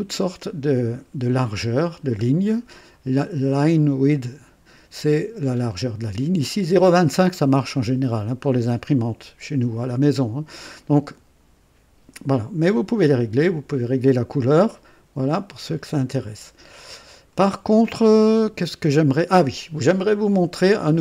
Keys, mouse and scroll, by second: 17.1 click, 20.4 scroll down 2.